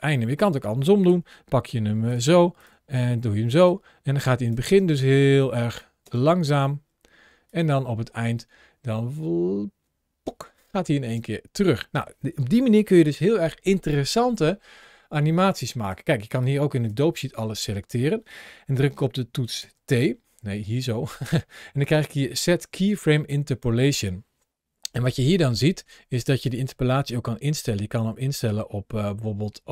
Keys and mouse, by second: 0.9 g, 2.6 g, 3.5 click, 4.1 click, 4.5 space, 5.9 space, 7.3 click, 11.0 space, 16.3-16.8 drag, 19.4 t, 20.4 t.